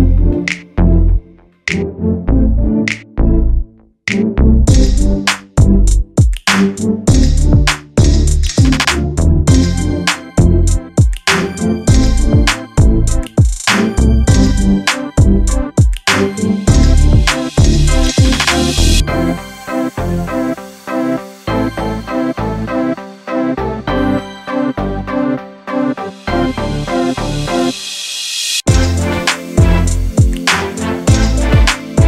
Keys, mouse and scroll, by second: 0.6 click, 1.4 click, 1.8-2.6 scroll down 3, 2.6 click, 3.5 g, 5.7 click, 6.3 g, 8.2 shift+middle click, 8.9 click, 9.4 g, 11.3 click, 11.6-12.1 scroll up 1, 12.1 shift+middle click, 12.6 click, 13.1 s, 14.9 r, 15.7 g, 18.6 s, 19.8 g, 21.3 r, 23.2 click, 23.7 s, 26.1 s, 27.2 g, 28.3 r, 29.3 g, 30.7 click, 31.3 r.